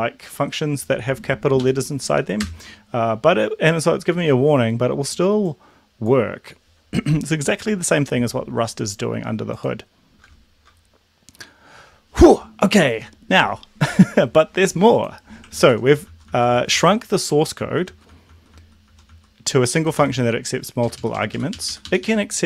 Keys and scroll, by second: 1.7 Up, 2.6 Return, 15.7 ctrl+z, 20.0 ctrl+z, 20.9 Down, 21.0 Down, 21.2 Down, 21.3 Down, 21.5 Up, 21.7 Up, 22.0 Up.